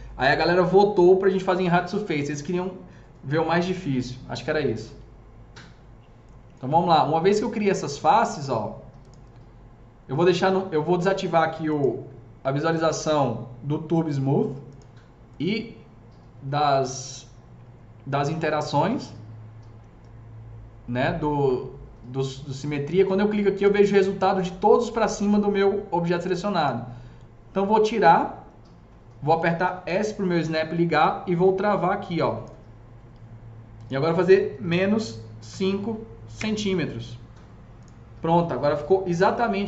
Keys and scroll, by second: 29.5-30.3 typing, 34.7 KP_Subtract, 36.2 Return.